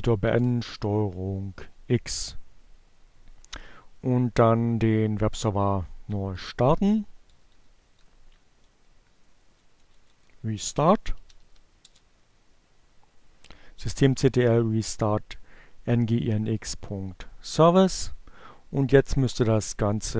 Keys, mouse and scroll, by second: 5.1 Up, 7.7 Left, 9.9-10.8 typing, 16.9 click, 18.4 click, 20.0 Return.